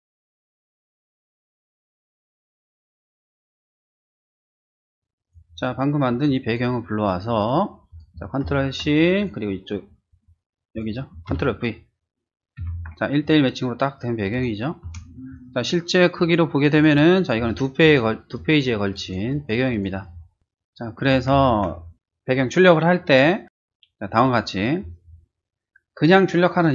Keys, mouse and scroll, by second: 0.3 click, 0.6 click, 4.6 click, 6.2 drag, 7.9 click, 8.4 ctrl+c, 9.2 click, 10.7 click, 11.3 ctrl+v, 13.2 ctrl+t, 13.2 click, 14.8 Return, 16.7 click, 17.4 space, 17.5 click, 17.8 click, 18.3 click, 18.9 click, 19.3 click, 19.7 click, 20.0 click, 20.8 ctrl+z, 23.1 click.